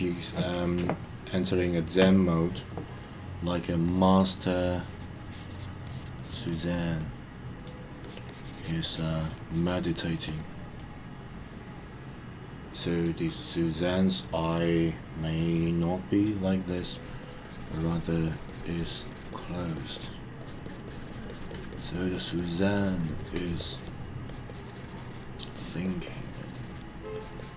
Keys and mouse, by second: 1.0 shift+middle click, 3.5 click, 3.8 click, 4.1 click, 4.5 click, 4.8 click, 5.2 click, 5.8 click, 6.1 click, 6.4 click, 7.0 middle click, 8.0 click, 8.3 click, 8.9 click, 9.5 click, 10.1 click, 10.2 click, 10.7-13.0 middle drag, 16.6 click, 16.9 click, 17.2 click, 17.4 click, 17.9 click, 18.2 click, 18.4 click, 18.7 click, 18.9 click, 19.1 click, 19.3 click, 19.5 click, 19.7 click, 19.9 click, 20.4 click, 20.6 click, 20.8 click, 21.2 click, 21.5 click, 21.7 click, 21.9 click, 22.1 click, 22.4 click, 22.6 click, 23.0 click, 23.2 click, 23.4 click, 23.6 click, 23.7 click, 24.2 click, 24.5 click, 25.1 click, 25.6 click, 25.8 click, 26.0 click, 26.3 click, 26.7 click, 27.1 click, 27.4 click.